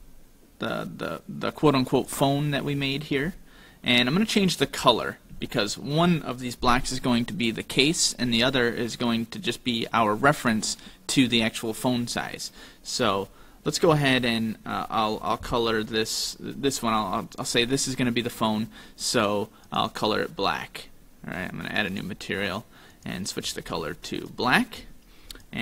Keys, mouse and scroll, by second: 2.5 scroll down 3, 3.0 middle click, 5.0-5.5 scroll up 2, 5.5 shift+middle click, 9.0-9.5 scroll up 1, 14.2 right click, 19.8 click, 22.0 click, 22.5 click, 23.4 click, 25.3 click.